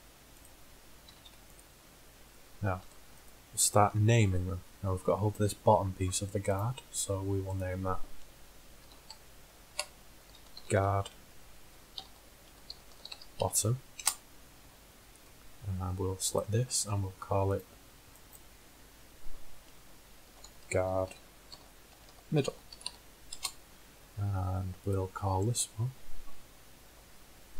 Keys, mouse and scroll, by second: 1.2 l, 1.4 p, 2.9 Tab, 8.4 right click, 13.1 t, 16.4-17.9 middle drag, 17.9-19.4 right drag, 22.5 d, 25.0 click.